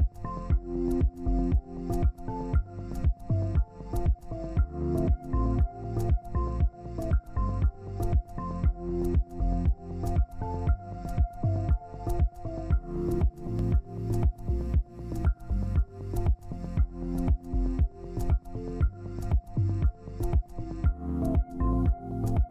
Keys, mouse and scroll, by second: 13.9 double click, 18.6 ctrl+space, 20.1 Up, 20.3 Up, 20.5 Up, 20.6 Up, 20.8 Up, 21.0 Up, 21.1 Up, 21.3 Up, 22.3 right click.